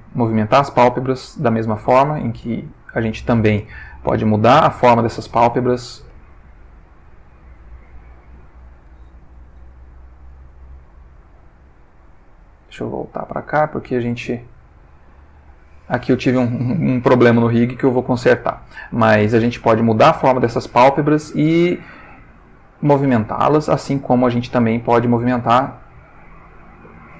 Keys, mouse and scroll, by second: 2.8 click, 4.4-6.8 drag, 6.1 Escape, 7.0-8.6 drag, 9.7 alt+g, 10.8 g, 11.2 Escape, 12.4-13.9 drag, 14.2 g, 18.0 Escape, 22.4 g, 23.1 Escape, 23.8 click, 24.7-27.1 drag.